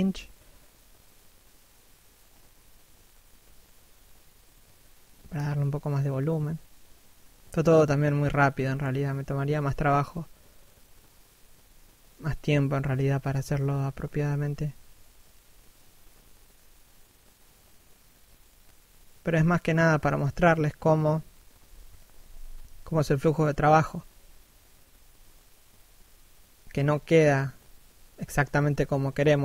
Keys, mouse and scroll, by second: 3.7 shift+middle click, 4.3 click, 5.8 shift+middle click, 6.1 click, 7.9 shift+middle click, 8.3 d, 9.1 shift+click, 11.3 shift+click, 12.7 shift+middle click, 13.3 shift+click, 14.7 shift+click, 15.9 shift+middle click, 16.6 p, 16.8 middle click, 17.2 scroll up 1, 17.6 shift+click, 19.3 p, 20.1 click, 21.3 p, 22.0 f, 22.4 click, 25.7 shift+middle click, 26.3 click, 27.4 shift+middle click, 27.8 f, 28.2 click, 28.8 shift+f.